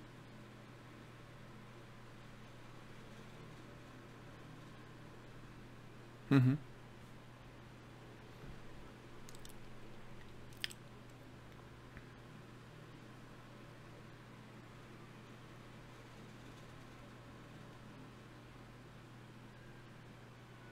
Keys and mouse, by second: 0.0-5.9 middle drag, 0.9 t, 6.9 ctrl+Tab, 11.7-18.9 drag, 17.4 right click, 20.2 k, 20.2 l.